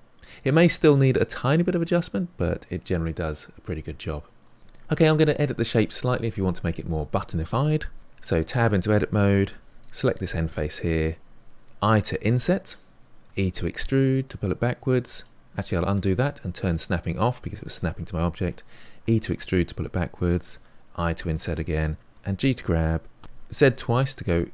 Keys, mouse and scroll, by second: 3.8-4.2 scroll down 2, 4.2-4.6 middle drag, 8.2 Tab, 9.4 3, 9.7 click, 11.1 i, 13.2 e, 15.6 ctrl+z, 17.0 click, 19.0 e, 20.8 i, 22.0 ctrl+z, 22.1 g.